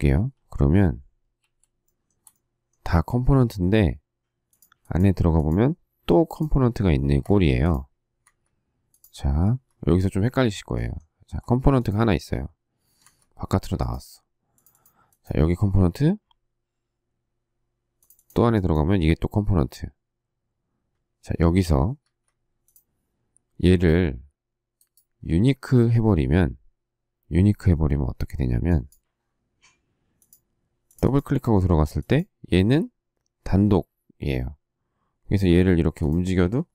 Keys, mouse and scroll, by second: 1.3 shift+q, 1.8 shift+middle click, 7.2 Escape, 8.2 Escape, 13.0 Escape, 22.0 Escape, 35.7 m.